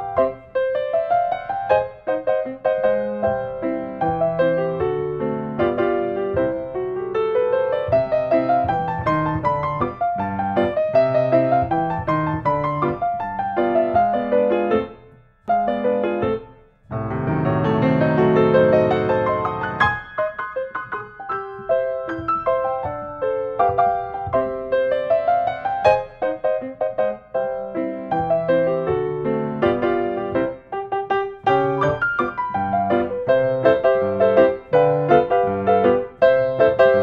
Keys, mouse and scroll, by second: 0.4 click, 1.5 click, 3.9 click, 5.2-6.3 drag, 12.2-13.2 drag, 17.2-18.2 drag, 20.5-21.5 drag, 22.2 click, 23.6 click, 25.2-26.2 drag, 26.6 click, 28.2 click, 28.8 click, 30.3-31.4 drag, 34.1-35.2 middle drag, 35.7-36.7 drag.